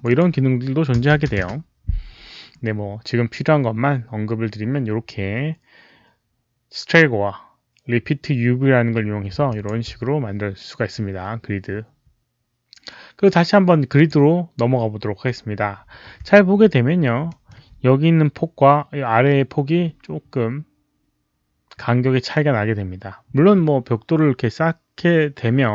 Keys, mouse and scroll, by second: 0.9 KP_0, 1.0 Tab, 1.3 Return, 1.3 Tab, 1.3 alt+click, 1.3 KP_0, 7.1 Return, 7.1 Tab, 7.1 alt+click, 7.1 KP_0, 8.2 Return, 8.2 Tab, 8.2 click, 8.2 KP_0, 9.4 alt+click, 12.1 alt+click, 13.8 alt+click, 16.5 alt+click, 16.5-16.9 alt+scroll up 2, 16.6 alt+middle click, 16.9 alt+scroll down 1, 16.9-17.4 alt+middle drag, 17.1 alt+click, 20.2 alt+middle click, 20.2 click.